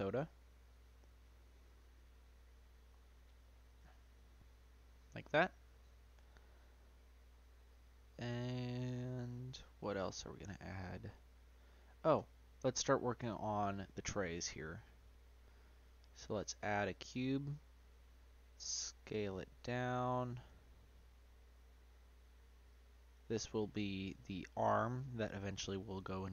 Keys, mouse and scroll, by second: 0.6-1.2 middle drag, 1.2-4.1 scroll down 1, 4.1-5.4 middle drag, 5.4 scroll down 1, 5.7-6.3 middle drag, 6.3-6.8 scroll down 1, 6.8-12.1 middle drag, 12.1 Tab, 12.4 middle click, 12.9 Tab, 13.8 click, 15.1-17.1 drag, 17.1-19.1 middle drag, 19.1 z, 20.8 s, 23.6 middle click, 24.2 g, 26.1-26.3 middle drag.